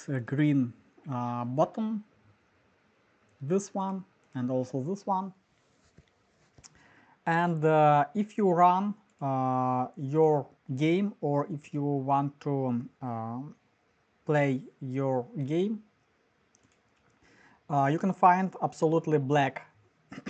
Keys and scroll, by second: 5.4 typing.